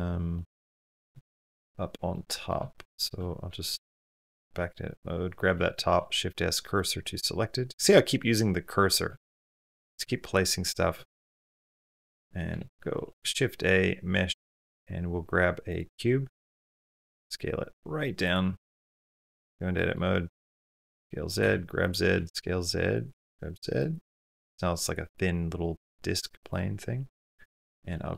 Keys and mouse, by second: 0.1 middle click, 1.1 shift+middle click, 1.9-2.3 middle drag, 2.7 shift+click, 4.0 Tab, 5.4 middle click, 5.7 shift+s, 7.7 shift+middle click, 8.0 middle click, 8.9 shift+click, 9.8 Tab, 10.9 click, 11.6 shift+s, 13.0 shift+a, 16.4 s, 18.9 Tab, 19.6 click, 20.4 s, 21.2 g, 22.0 s, 22.9 g, 24.1 3, 26.9 middle click, 27.4 shift+middle click, 27.8 middle click.